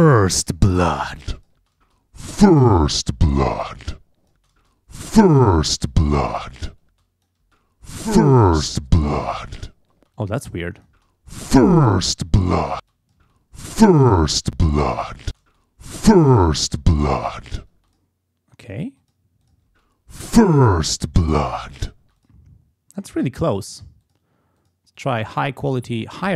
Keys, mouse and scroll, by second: 0.4-1.7 drag, 1.6 space, 3.2-4.5 drag, 4.4 space, 6.9 space, 7.0 click, 10.0 space, 10.2 click, 10.9 space, 12.8 space, 12.9 click, 14.5 click, 15.3 space, 17.8 space, 17.9 click, 18.6 click, 19.0 click, 19.7 space, 22.0 space, 23.5 click, 24.0 click, 24.6 click, 25.0 click, 26.0 click.